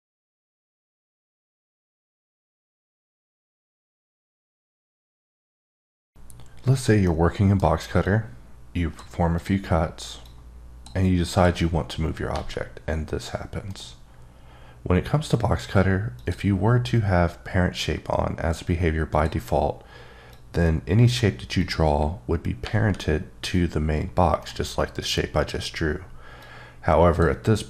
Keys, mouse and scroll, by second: 8.0 click, 9.4 click, 10.4 click, 11.3 click, 12.3 g, 13.6 right click, 16.1 click, 19.1 click, 20.3 click, 21.6 click, 22.6 g, 24.4 right click, 26.4 click.